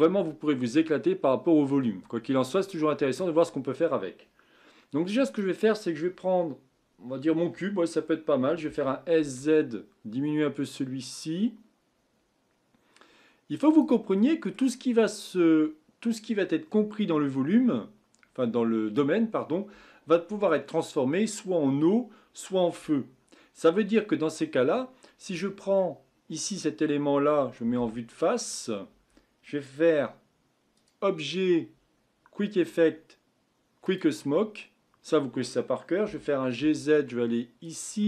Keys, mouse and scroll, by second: 5.3 click, 8.6 s, 14.1-14.8 middle drag, 14.8-17.4 scroll up 5, 25.7-27.7 middle drag, 27.7 KP_1, 28.6-30.7 scroll down 4, 30.7-33.9 drag, 36.0 g.